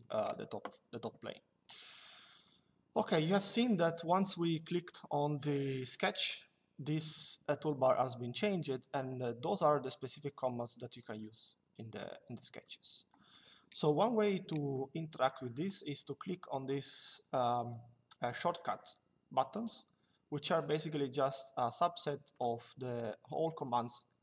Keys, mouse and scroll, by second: 22.0 click.